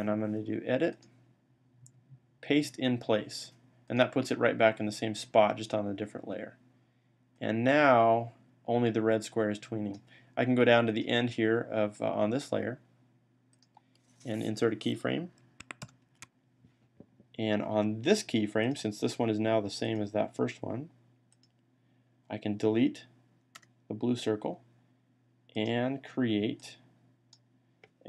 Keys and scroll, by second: 15.7 F6.